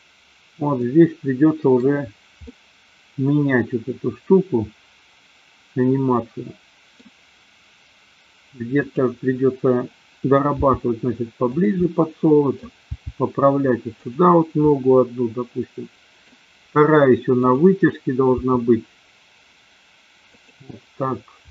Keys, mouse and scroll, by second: 0.8-1.9 middle drag, 2.5-7.1 middle drag, 10.6 g, 11.9 middle click, 13.0 g, 14.6-16.4 middle drag, 17.4 click, 18.4 g, 20.5 click.